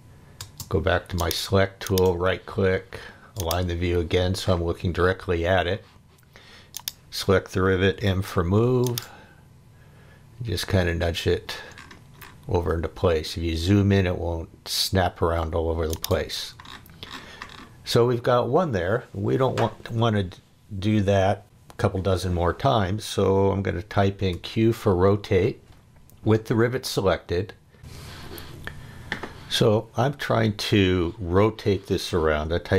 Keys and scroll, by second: 0.4 space, 7.9 m, 24.3 q.